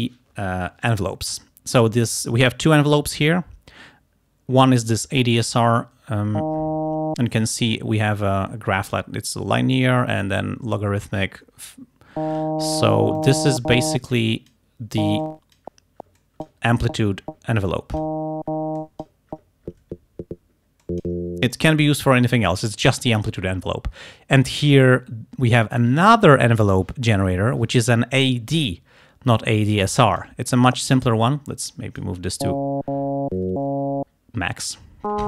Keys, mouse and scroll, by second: 13.2 click, 14.2 click, 15.3 click, 16.3 click, 17.7 click, 18.8 click, 20.9 click, 21.6-22.9 drag, 29.9 click, 31.7 click.